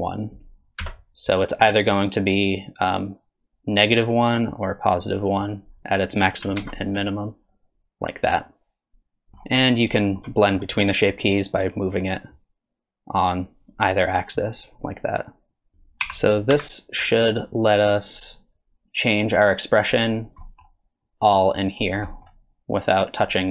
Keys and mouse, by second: 5.8 click, 6.6 ctrl+Tab, 6.9 click, 7.5-9.3 drag, 10.0 shift+click, 10.4 middle click, 11.2-15.7 drag, 16.0 r, 18.6-20.0 drag, 20.4 middle click, 21.1 click, 22.1 middle click, 23.1 click.